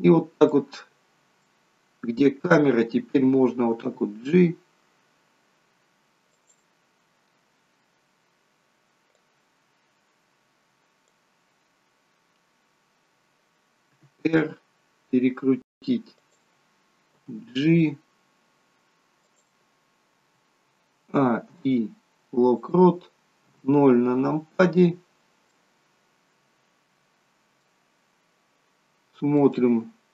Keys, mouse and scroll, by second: 0.7 middle click, 1.7-2.3 scroll down 1, 2.3 scroll down 1, 3.9 g, 9.4 click, 14.0 r, 17.2 g, 21.0 a, 21.4 i, 23.3 KP_0, 25.4 middle click, 28.0 scroll down 1, 28.7 scroll up 4, 29.3 middle click, 29.8 scroll up 2.